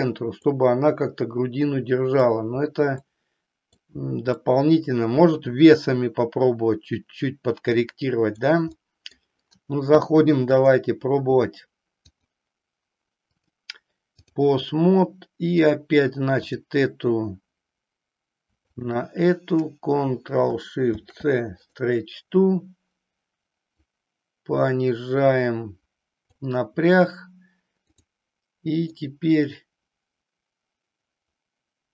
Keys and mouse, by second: 0.5-2.4 middle drag, 3.0 middle click, 4.4-8.5 middle drag, 8.9 middle click, 10.7 click, 13.4 click, 14.8 middle click, 16.4 click, 18.7 shift+click, 20.9 ctrl+shift+c, 23.8-26.4 drag, 29.9-31.9 middle drag.